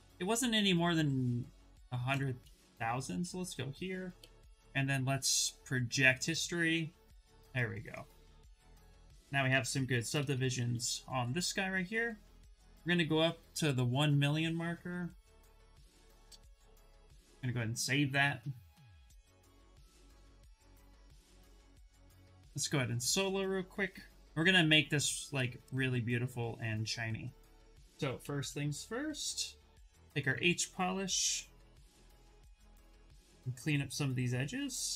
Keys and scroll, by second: 1.8 ctrl+d, 2.8 shift+f, 3.8 2, 8.2 shift+f, 8.9 shift+d, 11.3 shift+f, 12.3 ctrl+d, 16.9 Return, 20.3 s, 27.6-28.9 typing, 31.0 s.